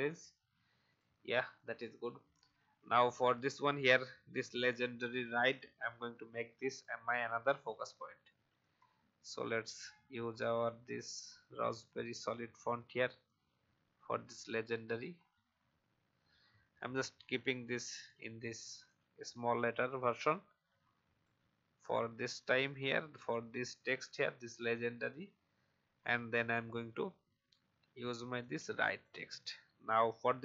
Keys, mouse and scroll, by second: 0.3 alt+scroll down 1, 0.8 click, 3.1 scroll down 1, 5.5-7.4 drag, 8.5 right click, 11.4 click, 13.2-14.5 alt+shift+drag, 15.5-16.2 Down, 17.5-17.9 scroll up 2, 17.9 right click, 18.7 click, 20.1 shift+click, 22.3 shift+click, 22.7-23.8 shift+drag, 24.5 shift+Down, 25.0 shift+Down, 25.1 shift+Down, 28.4-29.7 drag, 30.0 alt+shift+click.